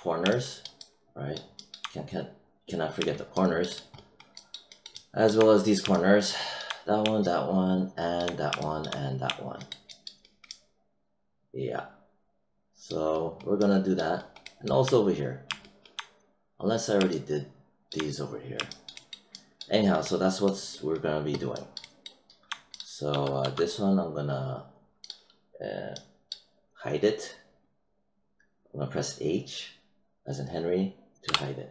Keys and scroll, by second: 23.0 w, 23.4 e, 31.2 h.